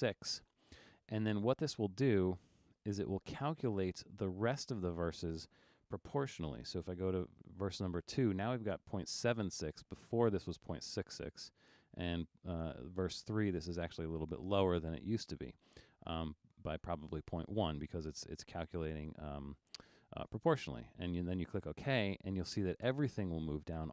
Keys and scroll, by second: 7.0 2, 12.1 3, 15.2 1.